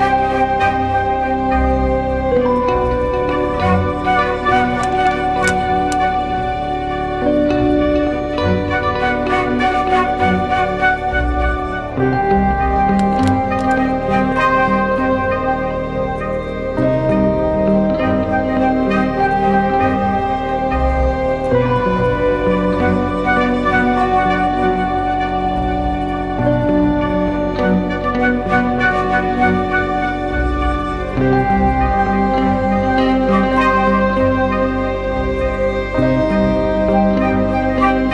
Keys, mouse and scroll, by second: 10.4 ctrl+t, 11.4 alt+shift+click, 15.0 alt+shift+click, 19.5 Up, 19.9 Right, 20.1 Right, 20.4 Return, 22.6 Right, 23.0 ctrl+h, 23.4 Right, 23.6 Right, 23.8 Right, 24.1 Up, 24.6 Down, 25.1 Left, 25.5 Right, 25.7 Left.